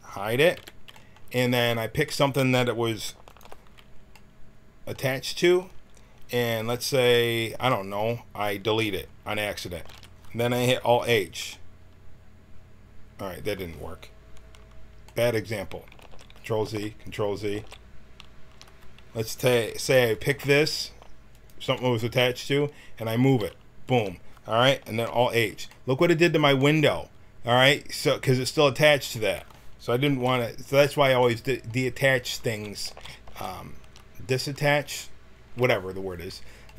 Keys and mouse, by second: 0.5 h, 1.0 middle click, 3.3 click, 9.7 x, 10.9 alt+h, 15.0-16.0 middle drag, 16.0 ctrl+z, 16.6 ctrl+z, 17.6 ctrl+z, 20.1 click, 23.2 g, 25.0 alt+h, 30.1 ctrl+z, 30.7 ctrl+z, 32.5 ctrl+z, 32.8 ctrl+z, 33.3 ctrl+z.